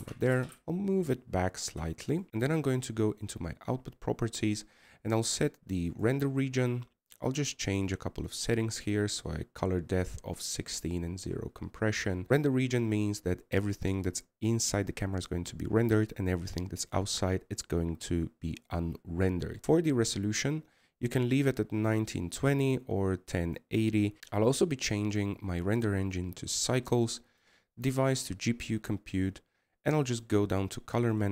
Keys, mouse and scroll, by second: 0.9-2.1 middle drag, 2.1 click.